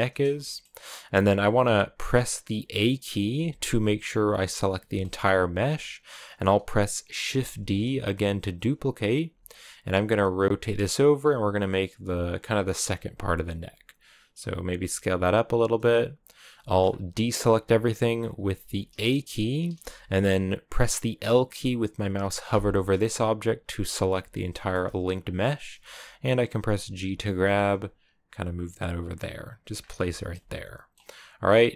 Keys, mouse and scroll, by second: 0.2-3.2 shift+middle drag, 3.2 a, 4.0 a, 4.8-7.4 shift+middle drag, 7.4 shift+d, 10.0 r, 11.2-14.7 typing, 16.5 shift+middle click, 16.7-18.2 scroll up 1, 18.2 s, 18.7 a, 22.3 l, 24.3 shift+middle click, 24.6-26.7 scroll up 1, 26.7 g, 29.6-29.9 scroll down 4, 29.9-31.7 shift+middle drag.